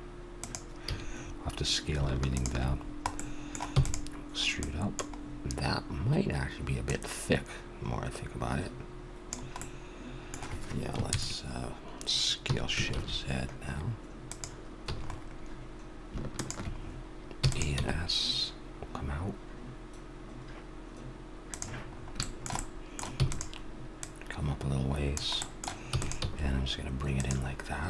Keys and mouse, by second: 0.8 a, 1.2 middle click, 2.3-4.0 drag, 3.7 e, 4.1-6.3 drag, 6.3 middle click, 6.8-8.6 drag, 9.6-11.3 middle drag, 11.1 ctrl+KP_Add, 12.4 s, 14.8 a, 16.3-17.8 drag, 17.4 e, 17.8 s, 17.9 click, 18.0 click, 21.9 middle click, 22.7 middle click, 23.1 e, 24.0-25.7 drag, 25.9 e, 26.2 s.